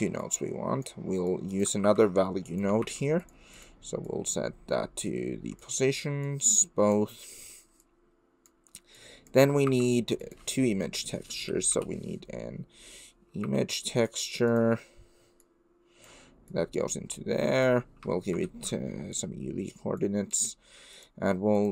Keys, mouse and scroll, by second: 0.4 click, 1.4 click, 1.8 shift+a, 4.2-5.6 drag, 6.5-6.9 drag, 8.0 click, 8.9 click, 9.6 shift+a, 15.5-16.1 drag, 16.5-17.6 drag, 18.4 ctrl+t, 18.8 middle click, 20.0 click, 20.9 click, 21.6 click.